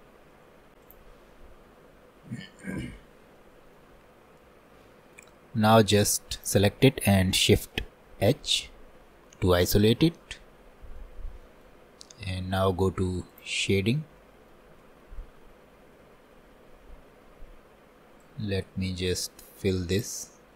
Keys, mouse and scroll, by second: 0.8 ctrl+a, 1.0 click, 3.5-5.4 shift+middle drag, 5.4-5.9 scroll down 2, 5.9 middle click, 6.5 click, 8.3 shift+h, 11.1 middle click, 11.8-12.1 scroll up 2, 13.4 click, 14.3 middle click, 15.9-16.4 scroll down 4, 18.4-20.3 drag, 20.3 scroll down 2.